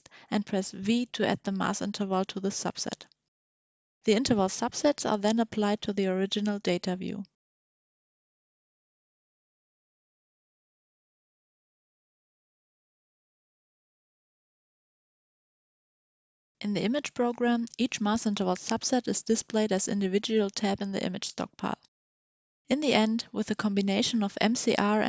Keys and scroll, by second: 0.3 v.